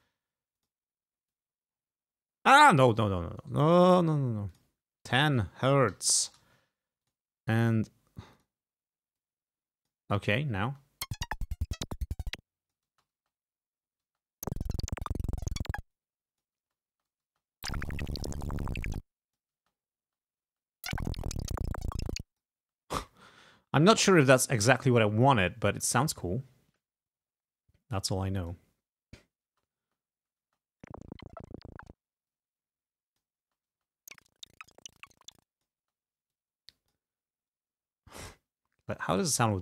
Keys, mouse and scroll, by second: 0.7 click, 1.4-2.9 drag, 3.5 ctrl+right click, 4.6 click, 5.3 1, 6.0 0, 6.3 Return, 7.2 click, 8.5 click, 9.3 click, 10.7 space, 12.0-13.0 drag, 13.0 space, 14.1 space, 15.1 click, 16.0 click, 16.7 space, 18.5-19.7 drag, 19.7 space, 21.2-22.7 drag, 22.7 space, 28.5 click, 29.6 space, 30.5 space, 32.0 space, 32.5-33.5 drag, 33.5 space, 35.3 click, 35.9 space, 36.5 click, 38.3 click, 38.9 space, 39.2 click.